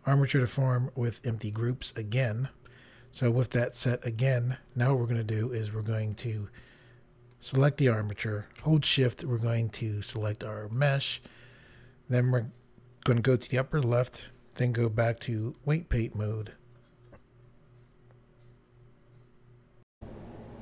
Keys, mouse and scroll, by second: 1.6 click, 6.1 click, 7.4 click, 10.8 shift+click, 14.0 click, 15.6 click, 19.9 Pause.